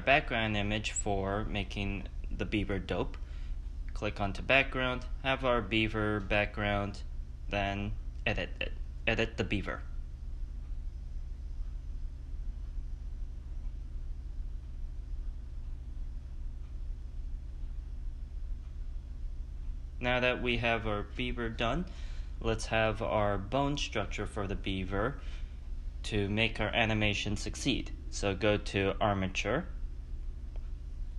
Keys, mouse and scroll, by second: 0.0 shift+a, 6.1 middle click, 6.1 s, 7.5 click, 8.3 click, 10.0 click, 10.0-12.4 typing, 10.4 click, 10.6 scroll down 1, 10.7 middle click, 11.0 middle click, 11.0 click, 11.3 click, 11.4 click, 11.5 middle click, 11.7 click, 11.8 middle click, 12.0 middle click, 12.2 middle click, 12.4 middle click, 12.5 scroll down 2, 12.7 click, 12.7 middle click, 13.0 middle click, 13.0 scroll up 3, 13.1 ctrl+z, 13.1 middle click, 13.3 click, 13.4-18.3 typing, 13.5 middle click, 13.7-14.0 scroll down 3, 13.7 middle click, 13.9 click, 14.0 middle click, 14.5 click, 14.5 middle click, 14.5 click, 14.6 middle click, 14.8 middle click, 14.9 middle click, 15.2 click, 15.2 middle click, 15.3 click, 15.4 middle click, 15.5 click, 15.6 middle click, 15.7 middle click, 15.8 click, 16.0 middle click, 16.2 middle click, 16.4 middle click, 16.8 middle click, 16.8 click, 16.9 middle click, 17.1 middle click, 17.3 middle click, 17.5 click, 17.5 click, 17.6 middle click, 17.6 scroll up 4, 17.7 middle click, 17.8 scroll down 1, 17.9 middle click, 18.0 scroll up 1, 18.2 click, 18.2 middle click, 18.4 middle click, 18.6 Tab, 18.7 click, 18.7 middle click, 18.9 middle click, 19.0 scroll up 5, 19.2 middle click, 19.2 click, 19.4 middle click, 19.4 s, 20.3 click, 21.8 shift+a.